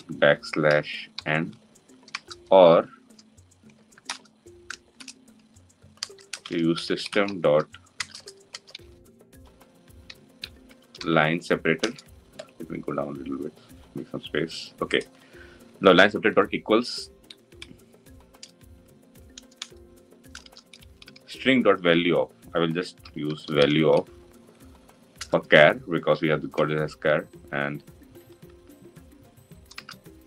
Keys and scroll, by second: 11.3 Return, 19.3 Return, 25.1 Return.